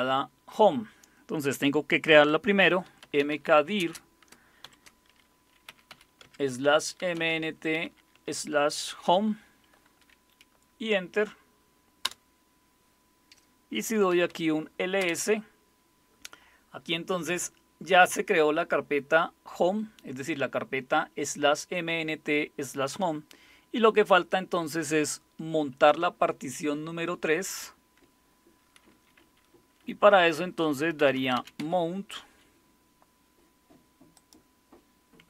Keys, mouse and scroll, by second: 2.6-9.5 typing, 8.1 Tab, 12.0 Return, 13.8-14.8 typing, 15.0 Return, 30.7-32.1 typing, 34.1 click.